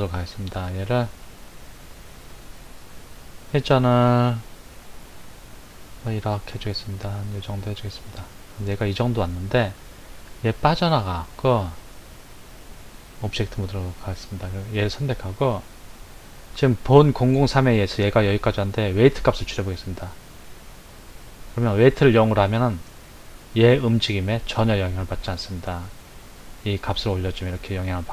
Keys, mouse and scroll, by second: 4.8 r, 11.4-13.7 drag, 14.5 click, 18.9-22.1 drag, 25.7-28.1 drag.